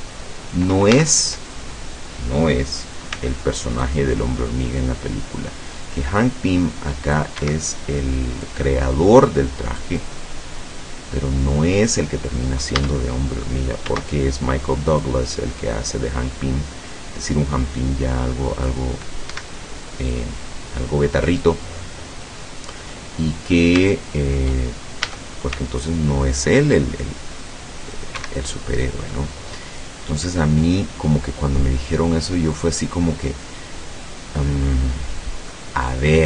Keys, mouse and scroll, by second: 0.9 a, 3.1 c, 3.9-7.4 drag, 7.4 Escape, 7.9 scroll down 1, 8.2 middle click, 8.3 click, 9.8-12.1 drag, 12.8 a, 13.9 c, 15.0-18.9 drag, 19.3 Escape, 20.2-21.6 drag, 21.7-22.1 scroll down 1, 22.3 middle click, 22.5 click, 23.3 scroll up 1, 24.0 shift+click, 24.1 shift+scroll up 1, 25.2 a, 25.6 c, 26.5-28.2 drag, 28.2 Escape, 28.5 click, 29.9-32.9 drag, 35.5-36.0 scroll down 2.